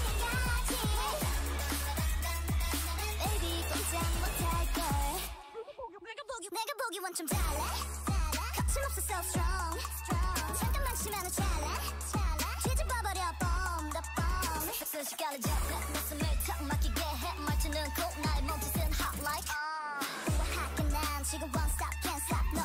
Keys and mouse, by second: 0.5 e, 1.3 s, 3.3 ctrl+z, 3.5 ctrl+z, 4.5 s, 6.7 s, 16.2 ctrl+z, 17.5-19.5 drag, 18.8 s.